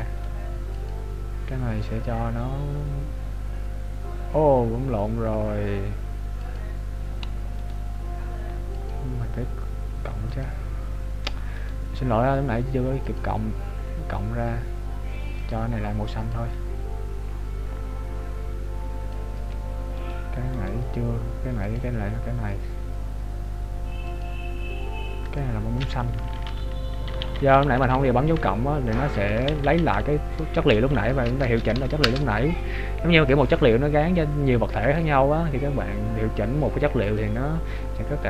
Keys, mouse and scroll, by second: 0.8 click, 7.9 right click, 8.9 click, 11.9 right click, 13.1 click, 20.3 right click, 21.9 click, 25.4 click, 26.4 Left, 27.3 Right, 29.8 Right, 35.1 right click, 37.3 click.